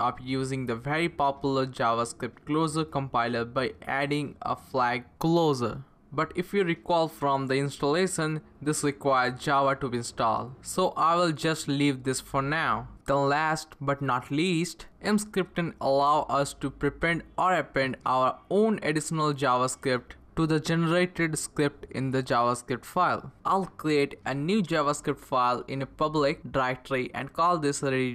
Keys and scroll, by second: 3.7 Page_Up, 3.8-9.4 typing, 12.1-15.4 typing, 24.5-27.3 typing.